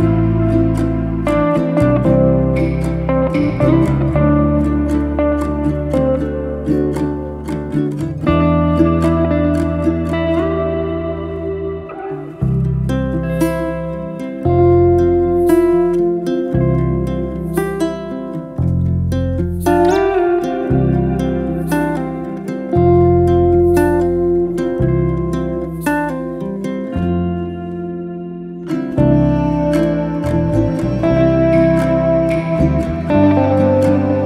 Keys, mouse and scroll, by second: 2.8 click, 3.2 ctrl+a, 4.1 click, 4.5 ctrl+a, 5.9 click, 6.3 ctrl+a, 7.6 click, 8.3 ctrl+a, 10.5 click, 11.0 ctrl+a, 12.7 click, 13.1 ctrl+a, 14.3 click, 14.7 ctrl+a, 17.3 right click, 17.3 click, 17.7 ctrl+a, 18.6 click, 18.9 ctrl+a, 19.9 right click, 19.9 click, 20.2 ctrl+a, 21.4-22.0 middle drag, 22.0 alt+z, 22.3-23.8 middle drag, 23.8 Tab, 26.0 click, 27.3 click, 28.2-29.0 middle drag, 29.0 scroll down 3, 29.1-29.6 middle drag, 29.6 click, 29.9-30.7 middle drag, 30.7-31.1 scroll down 1, 31.1-31.5 middle drag, 31.5 scroll up 2, 31.8-32.9 shift+middle drag, 32.9 click.